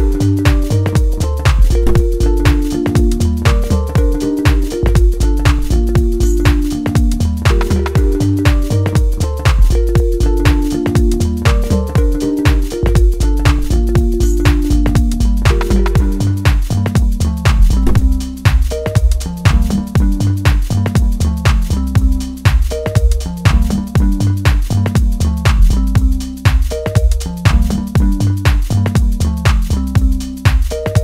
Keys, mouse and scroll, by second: 1.1-2.6 drag, 2.6 scroll up 4, 4.1 click, 4.5-4.8 scroll down 3, 4.8-5.2 scroll up 1, 5.5-10.9 drag, 10.9 scroll down 1, 11.1-11.6 scroll up 1, 11.6-13.3 drag, 14.9-19.4 drag, 19.6-21.5 drag, 21.5-22.2 scroll up 1, 22.2-23.6 drag, 23.6-24.1 scroll down 6, 24.1-24.6 scroll up 2, 24.6-25.3 scroll down 1, 25.3 shift+middle click, 26.0-28.8 drag, 29.0 click, 29.5 scroll up 5, 29.8-30.4 scroll down 2, 30.4-31.0 drag.